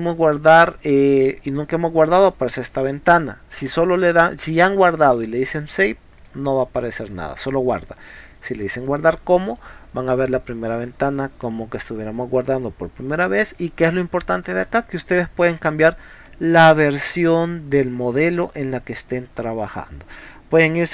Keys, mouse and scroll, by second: 0.0 drag, 3.9 click, 5.2 click, 6.2 click, 7.7 click, 8.6 click, 10.2 click, 13.6-14.6 drag, 15.6 click.